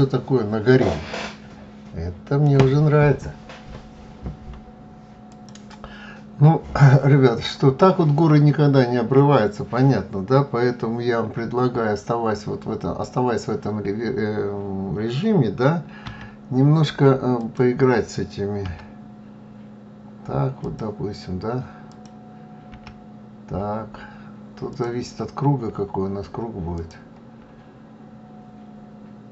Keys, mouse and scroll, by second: 6.3-6.6 scroll down 1, 6.6 scroll up 3, 15.4 f, 16.8 click, 18.0 g, 21.2 click, 22.1 g, 26.2 click.